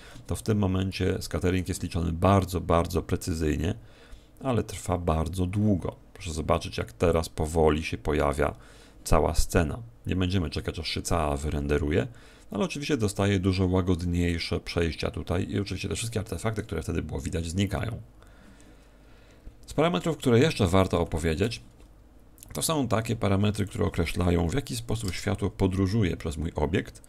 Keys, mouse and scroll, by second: 22.5 Escape, 23.5 click.